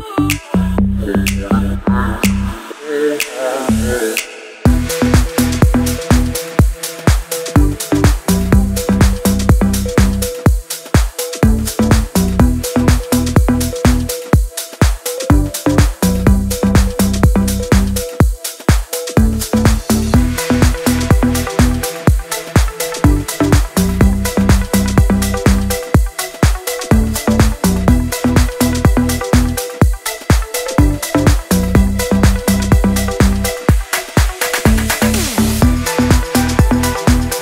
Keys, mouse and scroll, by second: 0.0 Right, 0.6 Down, 1.2 Left, 1.8 Down, 2.8 Left, 3.3 Down, 3.4 Right, 5.4 click, 8.0 ctrl+z, 8.2 click, 9.6 click, 12.6-13.0 click, 18.9 ctrl+v, 19.3 click, 21.6 drag, 24.5 click, 25.8-26.5 drag, 30.4-32.7 drag, 33.9 scroll down 1, 34.5 click, 35.9-36.6 scroll up 1, 37.3 click.